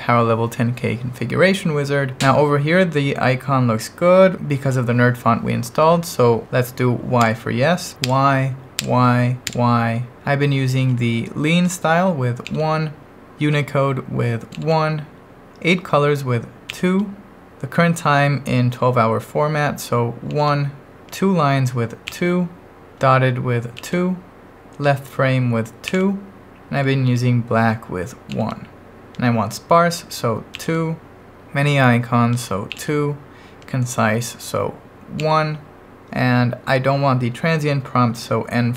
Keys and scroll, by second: 7.2 y, 8.0 y, 8.8 y, 9.5 y, 12.5 1, 14.5 1, 16.7 2, 20.3 1, 22.1 2, 23.8 2, 25.9 2, 28.3 1, 30.5 2, 32.7 2, 35.2 1.